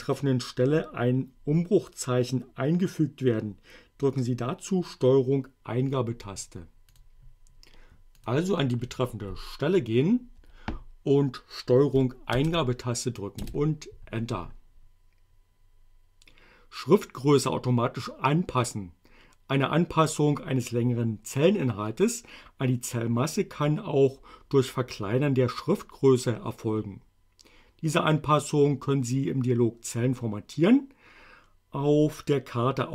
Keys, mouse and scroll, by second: 7.0 click, 8.2 click, 10.4 BackSpace, 12.4 ctrl+Return, 13.4 Return.